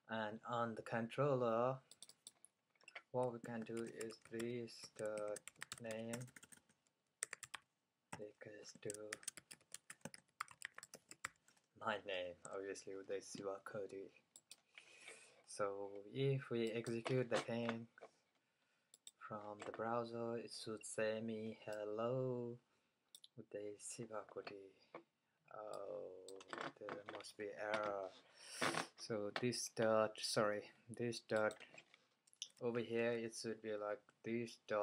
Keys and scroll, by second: 0.0-0.5 typing, 3.6-12.5 typing, 13.7-14.4 typing, 32.7 fn+Left, 33.3 Left, 34.3 fn+Left.